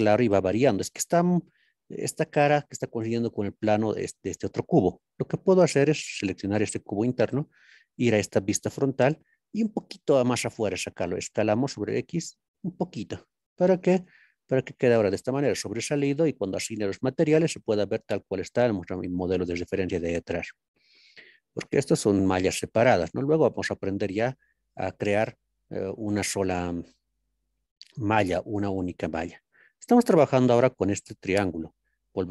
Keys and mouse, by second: 3.6 click, 7.3 KP_1, 11.6 x, 13.3 click, 13.8-14.8 middle drag, 16.4 middle click, 24.2-25.1 middle drag, 32.1 ctrl+KP_3.